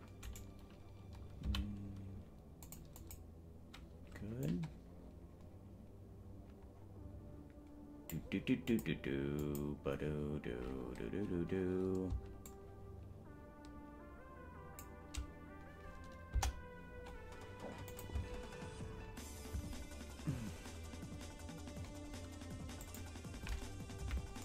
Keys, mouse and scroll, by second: 0.3 right click, 1.6 g, 3.1 click, 4.6-8.3 drag, 8.8 click, 9.6 click, 12.4-14.9 shift+drag, 16.4 KP_0, 18.0-20.3 drag, 18.4 space, 19.8 space, 23.0 click, 24.0 KP_Decimal.